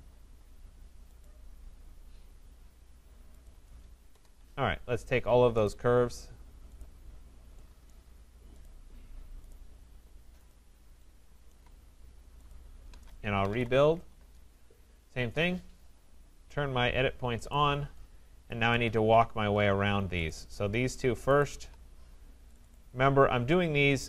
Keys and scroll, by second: 4.1 Return, 14.2 Return.